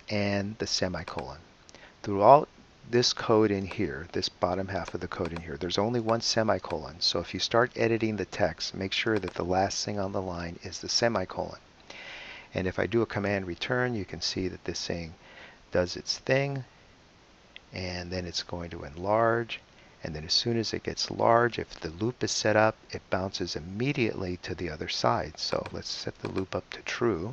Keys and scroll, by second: 13.2 super+Return.